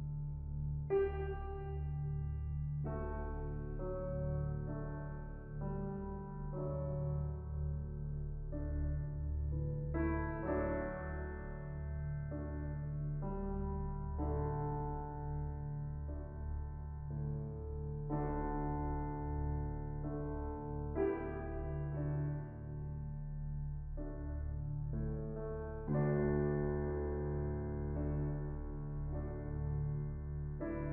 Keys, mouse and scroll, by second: 0.4-0.8 middle drag, 0.8-1.9 scroll up 2, 1.9-2.9 drag, 5.7-6.8 middle drag, 6.8-7.7 scroll up 4, 6.9 middle click, 7.7-8.8 drag, 9.2 middle click, 10.1 shift+click, 11.0 middle click, 11.6 shift+click, 12.3-13.3 middle drag, 13.3-13.8 scroll down 3, 13.8 scroll up 2, 14.0-15.2 middle drag, 15.2-16.2 shift+drag, 16.4-17.1 middle drag, 17.1 scroll up 2, 17.8-24.3 shift+middle drag, 24.3-27.5 drag, 27.5-30.2 shift+middle drag, 30.2 shift+click.